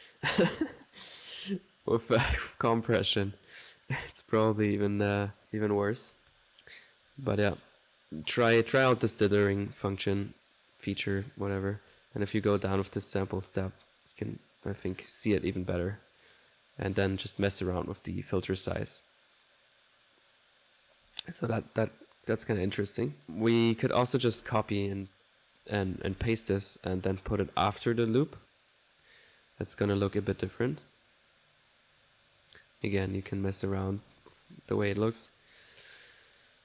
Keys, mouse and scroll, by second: 6.3 click, 9.5-14.7 drag, 15.5-19.9 drag, 20.5 middle click, 21.1 click, 22.3 1, 23.4 click, 24.1 ctrl+click, 24.4 ctrl+c, 25.3-26.8 typing, 25.6 ctrl+click, 26.4 ctrl+click, 27.0 ctrl+click, 28.5-32.8 drag, 33.2-35.6 drag, 36.4-36.6 drag.